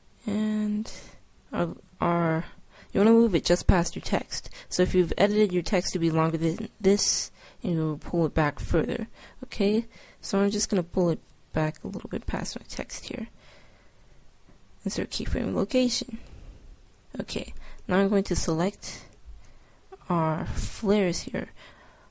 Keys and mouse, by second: 12.0-13.8 drag, 14.4 i, 18.0-21.0 right drag, 21.0-22.1 middle drag.